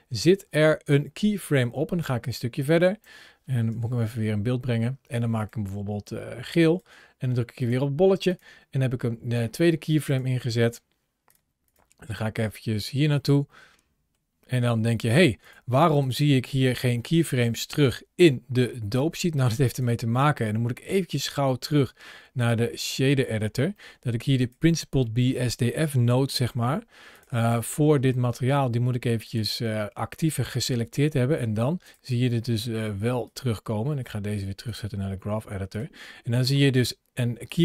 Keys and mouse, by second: 1.9 click, 3.5 KP_Decimal, 5.2 click, 8.1 click, 9.9 click, 10.4 click, 11.1 click, 13.1 middle click, 15.2 click, 17.0 middle click, 18.7 middle click, 19.7-22.3 drag, 23.7 middle click, 24.2 click, 24.8 middle click, 25.8 g, 29.1 click, 33.2-34.6 drag, 37.3 click.